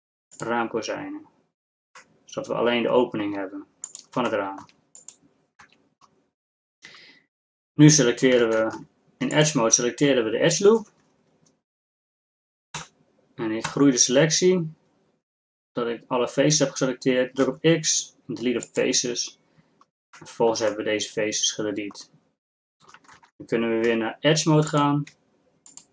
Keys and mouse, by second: 2.2 middle click, 3.0-3.6 middle drag, 4.0-5.7 middle drag, 5.7 Tab, 8.5 ctrl+Tab, 12.8 ctrl+KP_Add, 17.5 x, 20.4 click, 21.1 middle click, 21.6-23.2 drag, 23.2 ctrl+Tab.